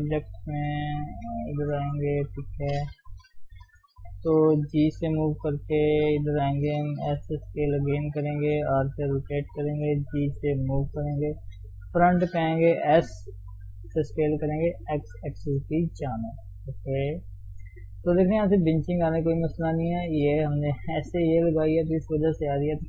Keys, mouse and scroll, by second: 0.0 ctrl+space, 0.1-0.5 scroll up 2, 0.5 shift+z, 1.0 shift+z, 1.7 Tab, 2.3 shift+z, 4.7 g, 7.1 s, 8.7 r, 9.9 g, 11.6 KP_1, 12.8 s, 15.1 shift+z, 15.6-16.0 scroll down 1, 16.0 Tab, 16.2 middle click, 16.9 ctrl+s, 17.2 middle click, 18.0-18.9 scroll up 1, 18.9 Tab, 19.2-21.8 middle drag, 21.8 KP_3.